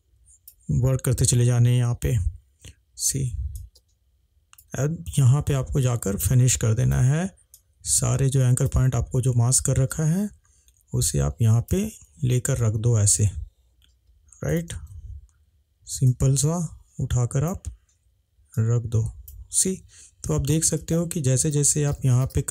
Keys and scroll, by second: 15.0 ctrl+z.